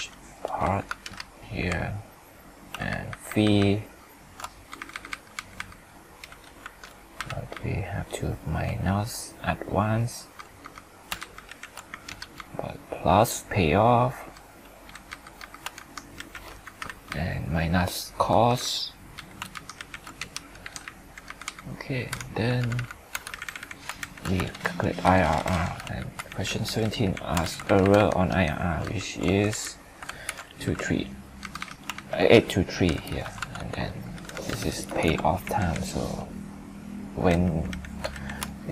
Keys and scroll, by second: 2.9 ctrl+Up, 11.2 ctrl+shift+Up, 11.5 ctrl+shift+Right, 16.2 ctrl+shift+Right, 19.6 ctrl+shift+Up, 19.8 ctrl+shift+Right, 24.4 ctrl+Return, 26.0 ctrl+d, 27.4 ctrl+c, 28.8 ctrl+Up, 30.2 ctrl+alt+v, 31.9 ctrl+Up, 38.1 ctrl+shift+Right.